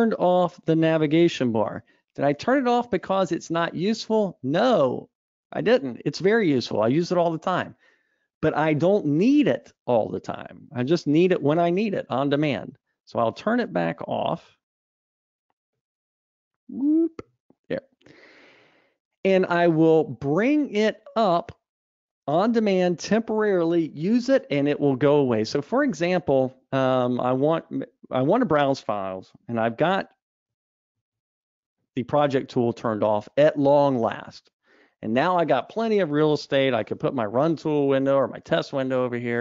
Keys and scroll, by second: 30.9 super+1.